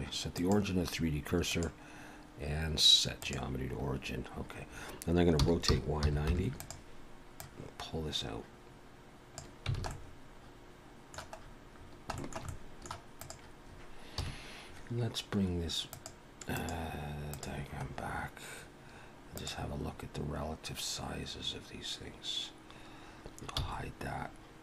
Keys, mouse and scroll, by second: 1.4 click, 3.8 scroll up 3, 4.4 scroll down 2, 5.4 r, 7.4 click, 9.8 alt+a, 9.9 middle click, 11.3-11.7 scroll up 2, 11.8-12.2 scroll down 3, 12.2 shift+middle click, 12.5 middle click, 13.2 click, 14.2 KP_1, 15.9 click, 16.5 click, 17.3 click, 19.4 click, 19.9-20.2 scroll up 2, 22.4-22.8 scroll up 1, 23.6 h.